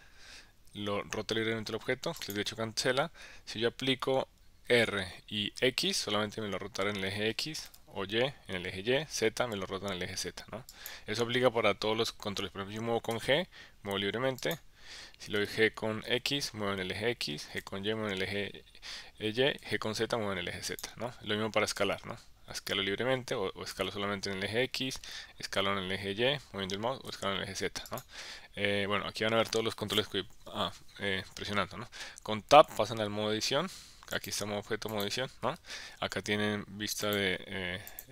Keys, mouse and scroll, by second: 4.7 r, 5.6 x, 7.6 y, 9.1 z, 13.1 g, 15.4 g, 16.0 x, 17.5 y, 19.6 z, 21.8 s, 23.7 x, 25.1 y, 27.1 z, 32.5 Tab, 33.3 Tab, 34.1 click, 35.4 Tab, 37.0 click, 37.9 click.